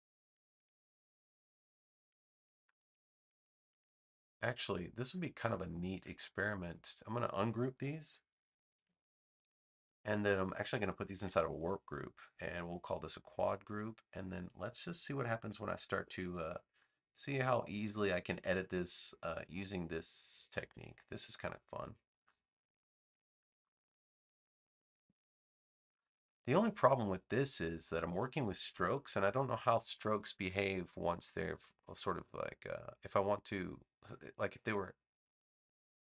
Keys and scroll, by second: 8.7 shift+super+g.